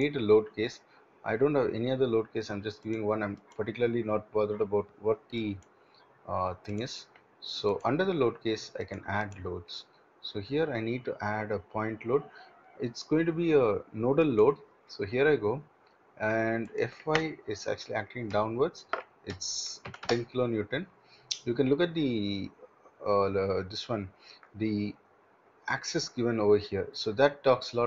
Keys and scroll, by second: 18.9-20.6 typing.